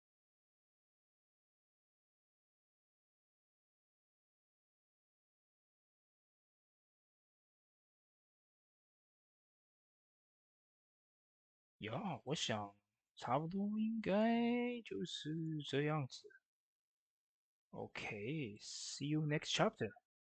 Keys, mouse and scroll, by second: 0.0 Tab, 0.4 click, 3.5 click, 3.5-20.3 drag.